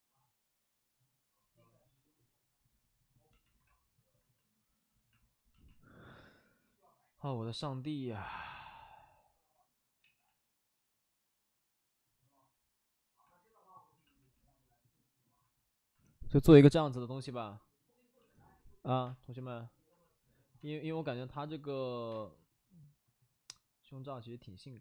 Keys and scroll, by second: 2.8 space, 9.9 ctrl+z, 10.2 ctrl+z, 18.1 ctrl+z, 19.0 space, 20.6 space, 21.7 ctrl+z, 22.1 space.